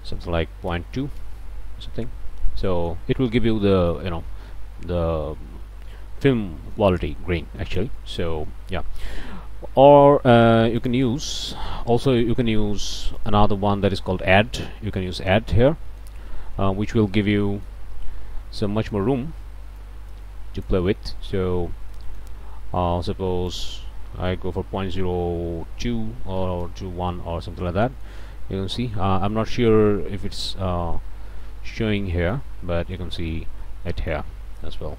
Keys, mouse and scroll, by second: 0.9 KP_2, 1.1 KP_Enter, 2.4 scroll down 2, 2.7 middle click, 3.1-3.5 scroll up 2, 3.6 middle click, 6.4 scroll down 2, 6.7 middle click, 7.6 scroll down 2, 8.0 middle click, 8.4 scroll down 2, 8.7 scroll up 2, 10.8 click, 11.4 KP_1, 11.6 KP_Enter, 13.2 click, 14.5 click, 15.4 scroll down 1, 15.8 click, 17.2 click, 19.8-20.8 drag, 21.3 click, 21.3-21.7 scroll up 1, 21.9 click, 22.3 scroll down 1, 23.5 click, 24.2 KP_Decimal, 24.7 KP_0, 24.9 KP_1, 26.2 BackSpace, 26.4 KP_2, 26.6 KP_Enter, 27.8 click, 29.3 click, 31.7 click, 32.5-32.9 scroll down 2, 33.3 middle click, 33.3-33.9 scroll up 4, 33.9 middle click.